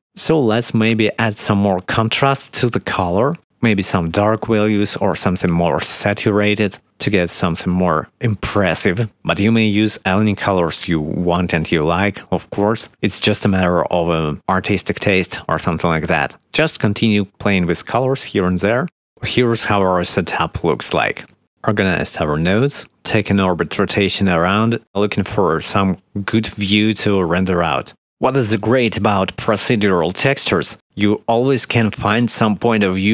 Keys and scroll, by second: 9.5 ctrl+z, 24.8 0, 25.5 shift+`, 31.9-33.1 typing.